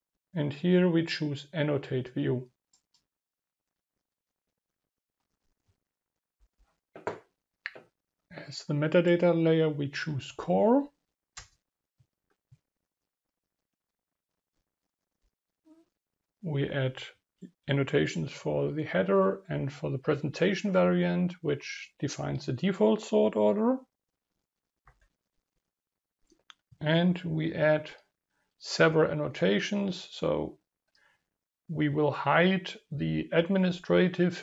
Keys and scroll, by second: 10.4 ctrl+v, 24.8 ctrl+v.